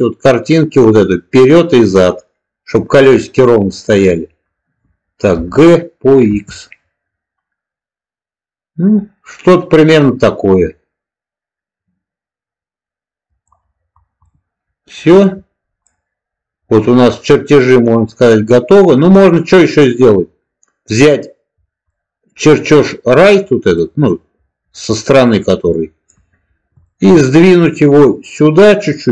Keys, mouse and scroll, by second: 5.2 g, 6.2 x, 13.2 click, 14.3-15.1 middle drag, 15.7-19.7 middle drag, 20.8 click, 21.8-23.2 middle drag, 23.7-24.0 middle drag, 24.8-26.0 middle drag, 26.7 shift+middle drag, 28.0-29.1 drag.